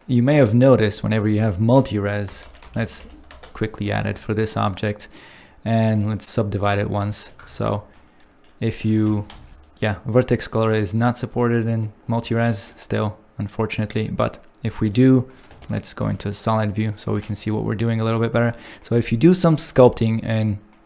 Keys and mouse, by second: 1.0-3.4 drag, 5.8 click, 7.1 shift+middle click, 7.5 ctrl+Tab, 9.1 5, 9.3 f, 9.5 click, 12.6 click, 13.0 click, 16.4 shift+2, 17.1 f.